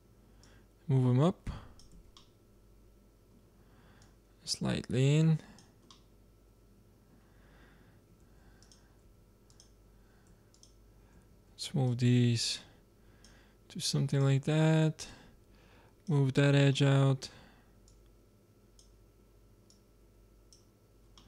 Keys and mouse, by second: 0.7 click, 1.1 click, 1.9 z, 2.0 click, 2.2-4.4 middle drag, 4.4-5.9 drag, 5.9-7.1 middle drag, 8.1 ctrl+Tab, 9.0 z, 9.9-13.5 drag, 11.2 z, 14.4-16.9 drag, 16.9-18.2 middle drag, 18.2-21.2 drag.